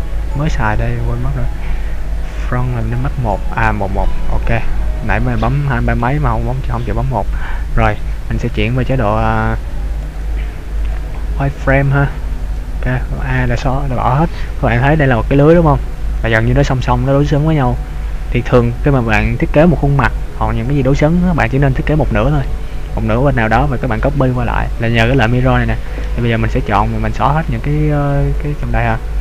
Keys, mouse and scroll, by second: 3.7-5.4 scroll up 10, 5.4-6.6 scroll down 3, 6.6 shift+middle click, 8.7 click, 10.9 click, 12.5 a, 26.0 b.